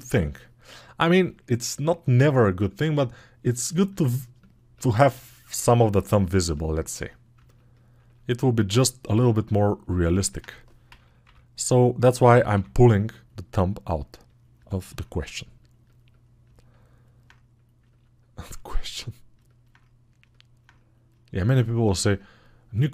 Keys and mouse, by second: 1.0-9.4 drag, 14.4 alt+[, 20.5-22.9 right drag.